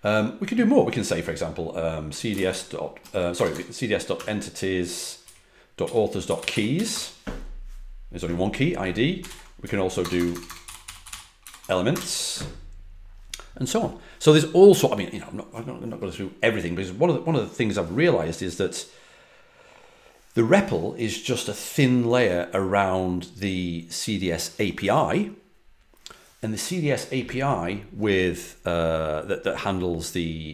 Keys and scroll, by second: 1.8-4.1 typing, 5.2 Up, 5.5-7.2 typing, 9.2 ctrl+l, 9.6 Up, 9.9-11.9 typing.